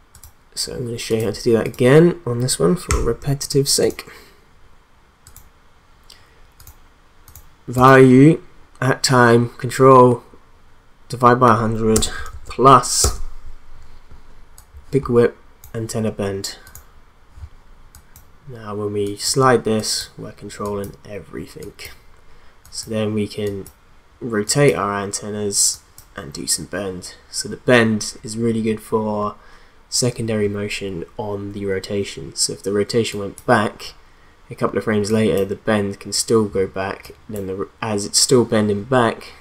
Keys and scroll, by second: 2.9 e, 11.9 space, 12.3 shift+=, 13.0 space.